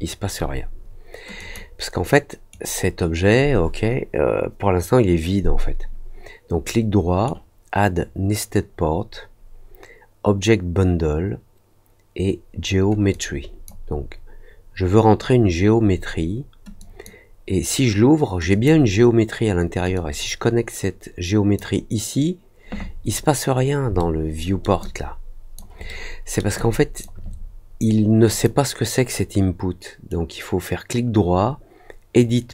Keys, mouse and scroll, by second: 1.3 click, 2.4-7.2 right drag, 13.1 click, 16.7 click, 18.4 click, 19.9-21.5 drag, 23.9 alt+middle click, 24.7 alt+click, 25.8 alt+middle click, 26.5 alt+click, 28.2 click, 30.0-32.1 right drag.